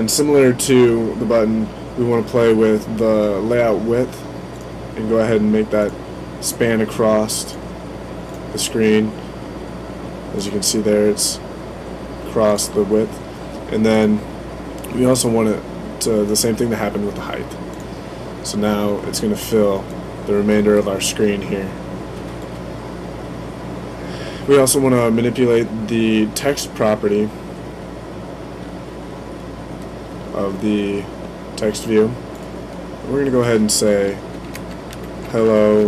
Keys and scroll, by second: 34.1-35.8 typing.